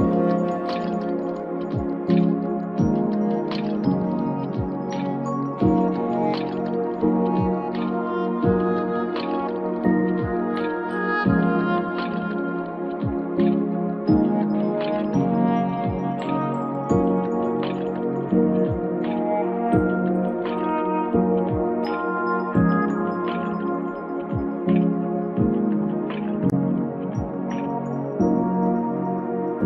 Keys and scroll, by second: 17.0 o, 18.1 f.